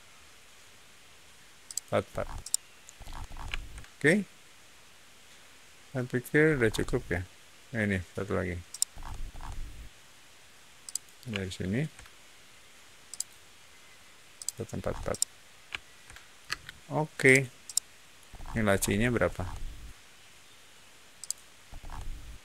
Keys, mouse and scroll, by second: 1.6 shift+click, 2.0 scroll down 1, 2.3 shift+middle click, 2.9-3.3 scroll down 2, 3.4-6.1 shift+middle drag, 6.4-8.6 scroll up 1, 8.6 shift+middle click, 8.9-9.3 scroll up 1, 9.3 shift+middle click, 10.7 shift+click, 11.3 shift+middle click, 13.0 shift+click, 14.3 shift+click, 14.7 shift+middle click, 15.0-16.2 shift+middle drag, 16.4 space, 17.1 click, 17.5 middle click, 18.2 scroll up 1, 18.5-18.9 middle drag, 19.1 scroll up 1, 21.1 click, 21.6 scroll up 1.